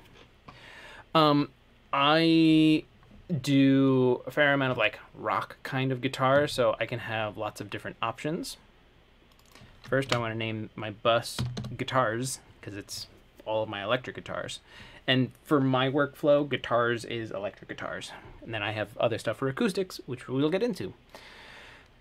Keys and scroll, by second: 11.5 Tab, 11.6 s, 11.8 Return, 14.1 typing.